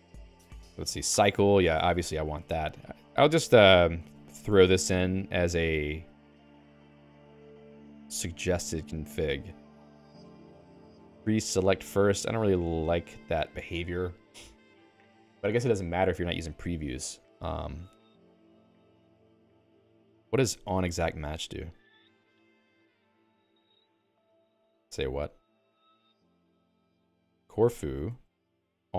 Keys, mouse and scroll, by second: 0.0 ctrl+s, 1.2 j, 1.8 x, 2.0 x, 2.2 x, 4.6 x, 22.1-23.8 typing, 24.1 ctrl+g, 27.3-28.9 typing.